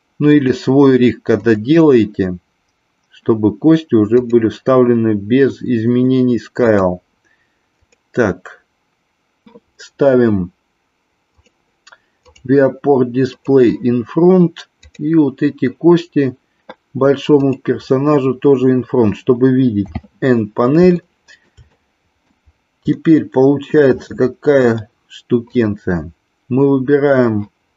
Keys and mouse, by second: 0.3-3.1 drag, 4.2 click, 6.7-9.4 drag, 11.3 click, 12.3 click, 13.3 click, 14.7 click, 17.4 click, 19.8 n, 20.9 shift+middle click, 21.8 middle click, 23.0-23.8 middle drag, 25.4 click.